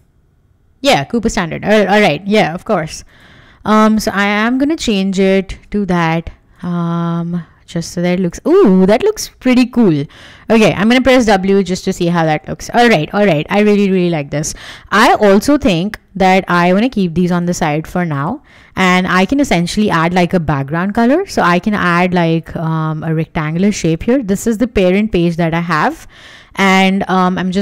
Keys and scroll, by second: 0.9 Escape, 1.2 super+Tab, 4.4-5.8 typing, 7.6 Escape, 10.9 w, 21.5 m.